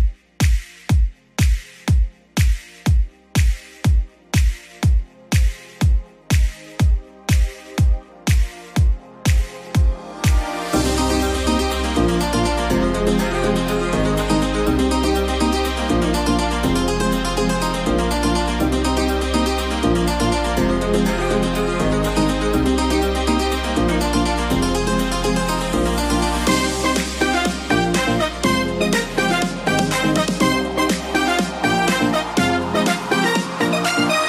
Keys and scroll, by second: 12.8 ctrl+z, 17.1 ctrl+a, 19.4 ctrl+q, 20.8 ctrl+k, 21.0 ctrl+u.